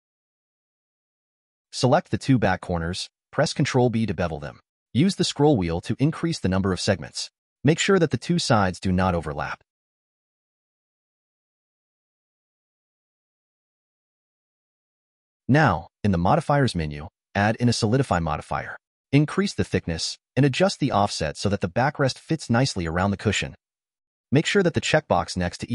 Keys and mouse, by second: 0.2-1.3 drag, 2.0 click, 3.1 click, 3.6 click, 4.9 shift+click, 6.3 click, 7.8 ctrl+b, 12.4-14.3 drag, 14.3 middle click, 16.1 click, 16.9-19.5 drag, 21.4-23.7 drag, 24.4 click.